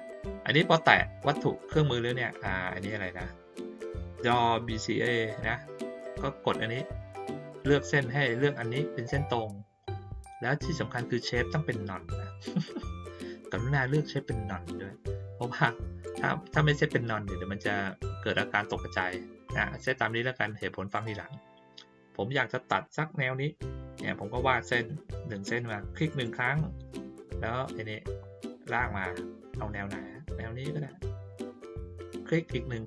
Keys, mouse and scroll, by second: 26.1 click, 32.7 click.